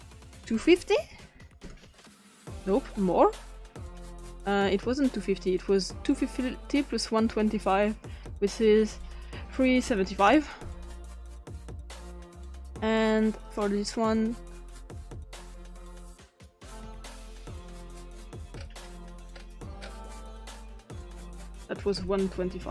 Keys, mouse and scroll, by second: 0.9-1.3 typing, 1.6 Return, 6.1 click, 8.3-8.7 drag, 8.9 click, 9.5-10.1 typing, 10.3 Return, 12.7-14.5 drag, 15.4 Return, 15.4 typing, 16.1 click, 17.5 click, 18.5 scroll up 2, 19.3-19.9 scroll up 3, 21.6 click, 22.3-22.7 typing.